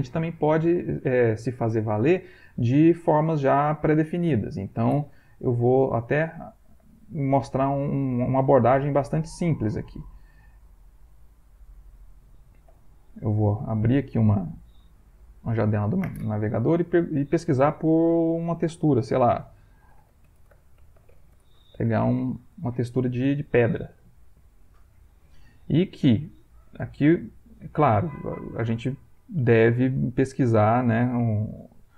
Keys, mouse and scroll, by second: 3.6 click, 10.2 right click, 10.7 right click, 11.5 click, 12.7 ctrl+shift+p, 14.1-15.5 drag, 19.6-21.6 typing, 24.2 click, 30.4 click.